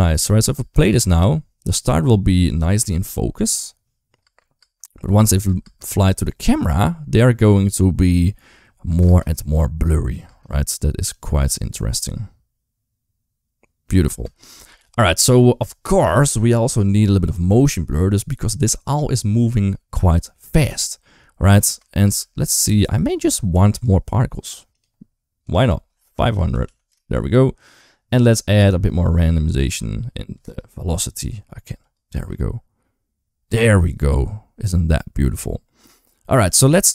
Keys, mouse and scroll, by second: 0.4 space, 0.7 space, 3.2 click, 4.1 space, 4.4 space, 5.3 space, 5.4 space, 8.7 space, 8.9 space, 10.1 space, 10.9 click, 13.9 space, 14.6 ctrl+s, 21.5 space, 21.9 space, 23.6 click, 25.4-26.7 drag, 26.5 0, 28.4-30.3 drag, 31.7 click, 32.0 space, 36.7-36.9 typing.